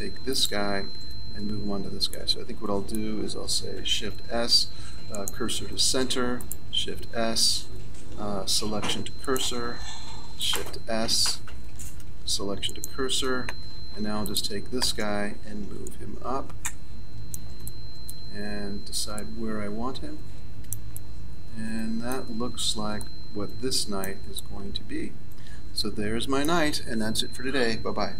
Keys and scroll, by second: 3.8 shift+s, 8.0 shift+s, 11.7 shift+s.